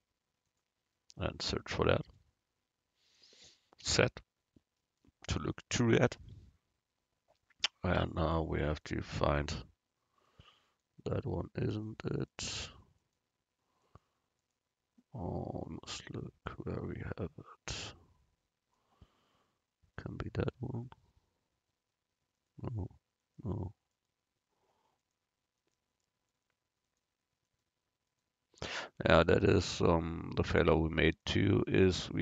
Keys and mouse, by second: 3.9 z, 8.2-10.3 right drag, 10.5 middle click, 10.5 right click, 11.8-16.4 right drag, 16.4-19.3 middle drag, 20.1-23.9 right drag, 26.5-32.2 right drag.